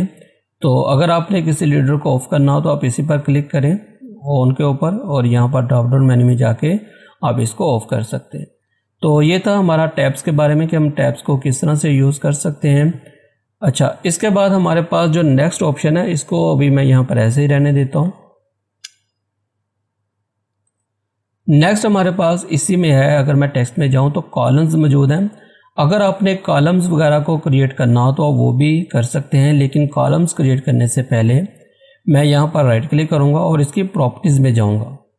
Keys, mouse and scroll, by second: 2.3 click, 7.6 click, 10.8 scroll down 1, 12.3 scroll up 1, 13.7 click, 16.0 scroll down 1, 16.5 scroll up 1, 17.1 click, 18.0 ctrl+a, 18.8 BackSpace, 19.3 scroll down 1, 20.8 click, 30.4 click, 32.0 right click, 33.5 click.